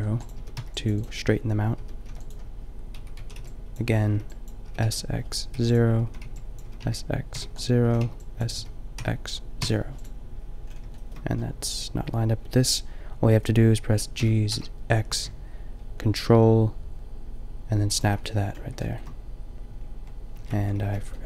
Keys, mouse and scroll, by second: 0.3 s, 1.7 s, 3.2 a, 3.4 n, 4.0 b, 4.6 s, 5.6 click, 6.0 a, 6.2 b, 6.6 s, 7.5 click, 7.8 a, 8.0 b, 8.6 s, 14.1 g, 20.4 ctrl+z, 20.9 b.